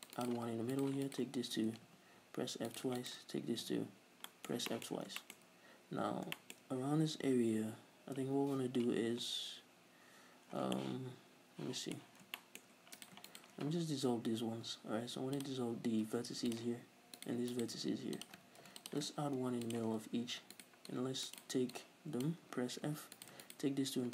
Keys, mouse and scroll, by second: 0.8 right click, 1.1 shift+right click, 1.8 f, 2.7 right click, 3.0 shift+right click, 3.8 f, 4.1 scroll down 2, 4.3-12.1 middle drag, 5.6-6.4 scroll up 2, 9.7 scroll down 1, 10.2 scroll up 2, 10.5 scroll down 2, 12.1-12.4 scroll up 2, 12.2-13.0 shift+middle drag, 13.0 right click, 13.3 shift+right click, 13.7 x, 17.2 right click, 17.6 shift+right click, 17.8 x, 18.7 ctrl+r, 18.9 click, 19.3 ctrl+r, 19.8 click, 20.6 right click, 20.9 click, 21.5 right click, 21.8 click, 22.9 f, 23.2 right click, 23.5 shift+right click.